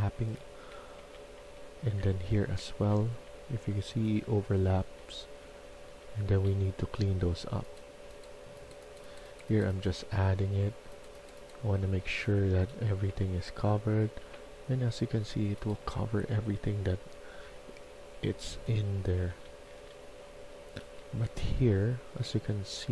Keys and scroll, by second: 0.8-4.1 typing, 5.2-7.1 typing, 9.9-14.1 typing, 15.5-21.4 typing.